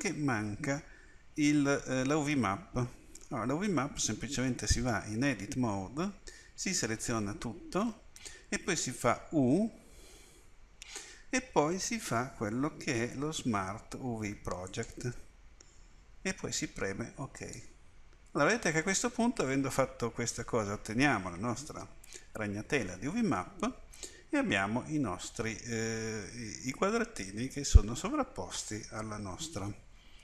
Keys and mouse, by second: 5.0 Tab, 6.7 a, 7.0 a.